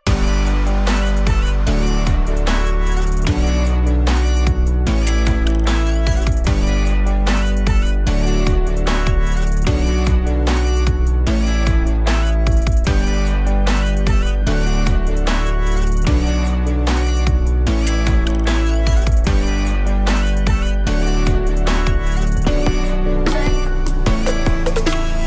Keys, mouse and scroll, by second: 1.3-2.5 drag, 6.9-7.3 scroll down 1, 7.3-8.7 middle drag, 8.7 click, 12.1-13.4 drag, 13.7-14.8 middle drag, 14.8 click, 18.6 click, 22.4-23.5 drag, 23.8 shift+a.